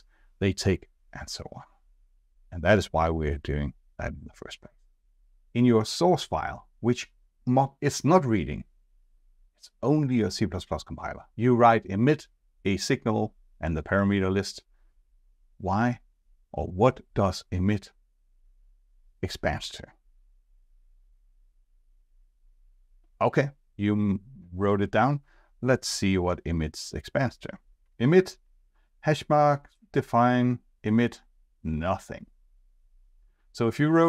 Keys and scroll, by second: 28.1 F2.